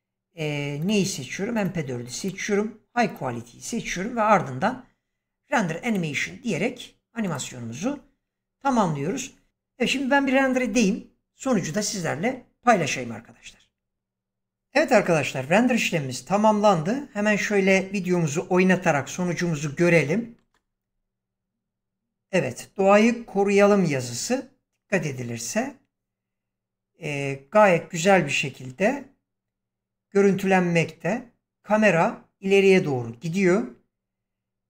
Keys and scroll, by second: 20.3 space.